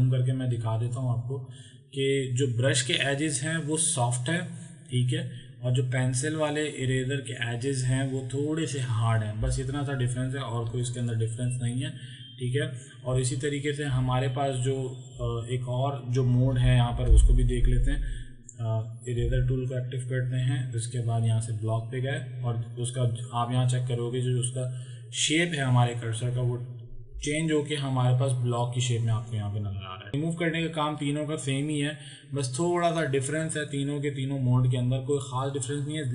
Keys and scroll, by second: 0.0 z, 15.2 space, 19.3 e.